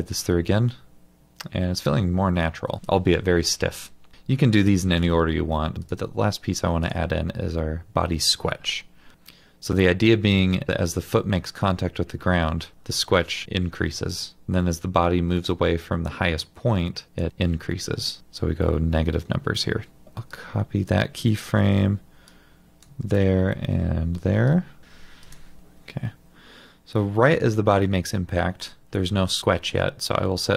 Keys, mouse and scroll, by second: 20.1 typing, 21.7 typing, 25.6 ctrl+z.